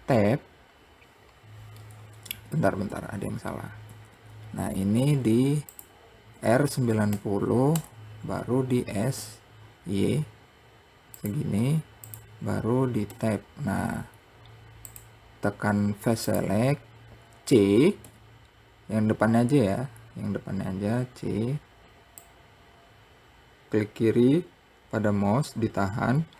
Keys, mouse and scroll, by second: 1.8 ctrl+z, 2.4 ctrl+z, 5.7 r, 12.5 Tab, 13.1 scroll up 2, 14.3 click, 15.6 click, 17.4 c.